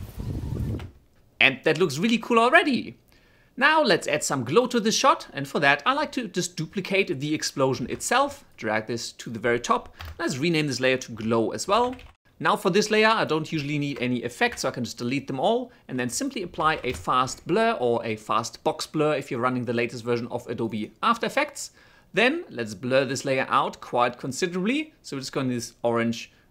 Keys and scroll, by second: 0.7 space, 8.1 ctrl+d, 10.3 Return, 11.1 o, 11.2 Return, 14.8 Delete, 16.6-17.6 typing.